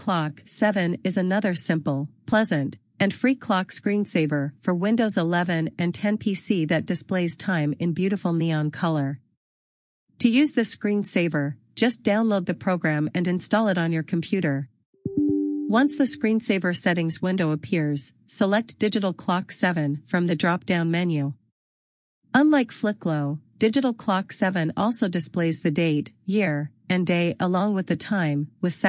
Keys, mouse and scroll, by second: 2.1 click, 6.5 click, 6.7 double click.